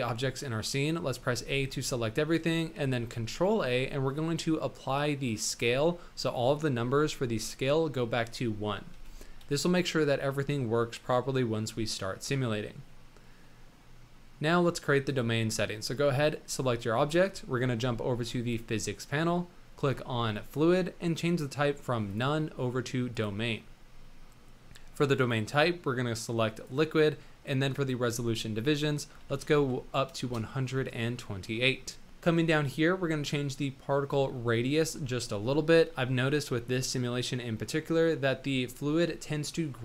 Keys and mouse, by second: 1.3 a, 3.3 ctrl+a, 6.2 click, 6.8 n, 8.9 n, 9.1-9.6 drag, 12.7-14.3 drag, 13.2 middle click, 15.1 click, 20.3 click, 22.2-23.3 drag, 25.2-26.9 drag, 27.7-32.0 drag, 34.8-39.8 drag.